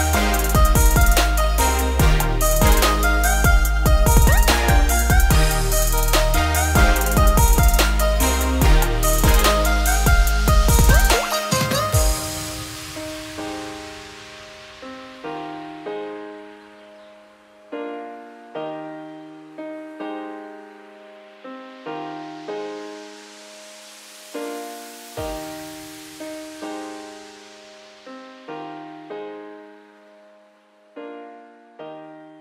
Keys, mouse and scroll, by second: 0.1 click, 0.5 Tab, 1.1 a, 1.5-2.0 scroll up 2, 2.0 alt+e, 3.7 s, 4.8 a, 5.4 e, 6.7 a, 7.5 z, 8.0 Tab, 8.4 click, 9.2 click, 10.2-10.7 shift+middle drag, 10.7 alt+x, 12.0-13.1 scroll up 1, 13.1 ctrl+a, 14.6 click, 15.5-18.6 shift+drag, 18.8-20.3 right drag, 20.3 click, 21.2 click, 23.0-23.7 scroll up 4, 23.7 Tab, 24.2 a, 25.1 shift+n, 25.6 Tab, 27.0 click, 27.2 `, 27.8-28.1 middle drag, 28.1-28.5 scroll up 2, 28.5-29.8 middle drag, 29.8-32.4 shift+drag.